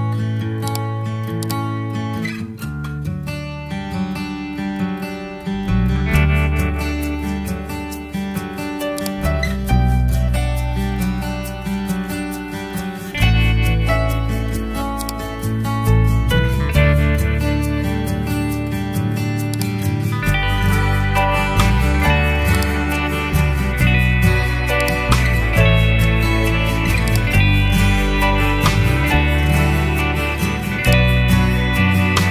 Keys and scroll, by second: 9.9 4, 10.2 0, 27.9 2, 28.3 0.